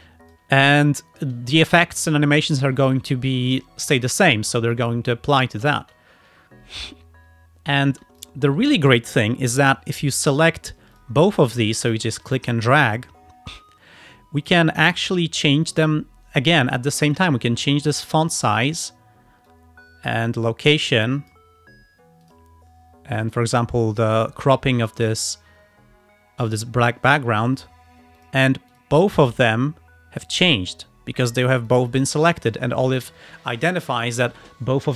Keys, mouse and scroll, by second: 0.5 space, 1.5 space, 1.8 click, 2.6 space, 5.6 space, 5.7 click, 8.0 space, 8.3 click, 9.8-11.0 alt+drag, 11.0 alt+click, 11.4 alt+click, 12.6 click, 14.5 click, 14.9 click, 15.8 click, 17.2-19.0 drag, 19.5-21.6 drag, 22.3 click, 23.2 click, 25.3-27.4 drag, 28.3 click, 28.8 click, 29.2-31.5 drag, 31.8-32.9 drag.